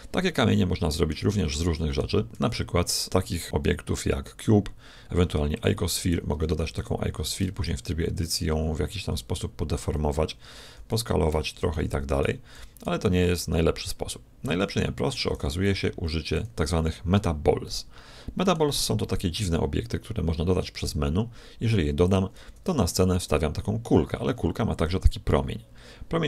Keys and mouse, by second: 2.3 shift+a, 6.3 g, 7.3 Tab, 8.1-9.9 right drag, 8.9 g, 10.5 s, 11.5 a, 11.7 a, 12.5 s, 14.3 x, 15.1 Escape, 15.7 Tab, 16.0 x, 17.5-19.5 middle drag, 19.1 shift+a, 22.6 g.